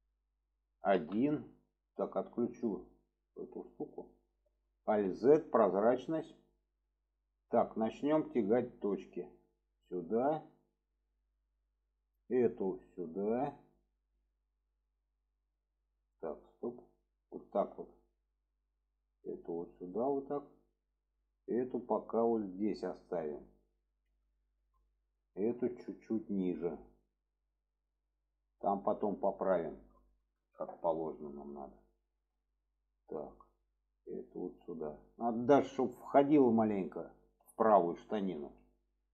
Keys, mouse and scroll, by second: 2.5-4.0 drag, 5.6 shift+middle click, 7.9 click, 8.8-10.5 drag, 11.1 shift+middle click, 11.8 click, 12.8-14.2 drag, 15.1-15.5 middle drag, 16.2-16.7 alt+middle drag, 17.4 shift+middle drag, 18.7 click, 19.9 shift+middle drag, 20.9 click, 21.8-23.7 drag, 24.3 shift+middle click, 25.1 shift+middle drag, 26.1-26.5 drag, 27.7-28.9 drag, 29.5-29.8 shift+middle drag, 30.5 shift+middle click, 31.3 shift+middle drag, 32.1 shift+middle drag, 33.1-33.4 drag, 33.9-37.0 drag, 37.3-37.6 shift+middle drag, 38.4 alt+z.